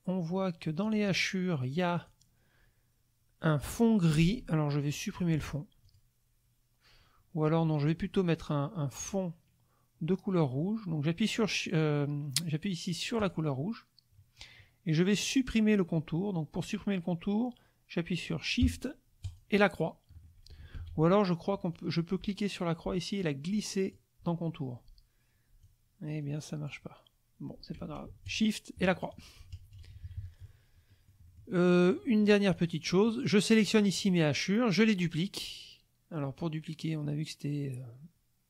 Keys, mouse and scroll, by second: 0.8 click, 1.9 click, 5.8 click, 13.2 click, 19.2 shift+click, 20.8 ctrl+shift+z, 21.7-24.1 drag, 25.6-26.8 drag, 28.2 ctrl+shift+click, 29.0 shift+click, 29.7 KP_Subtract, 30.9 click, 31.7 click, 32.5 click.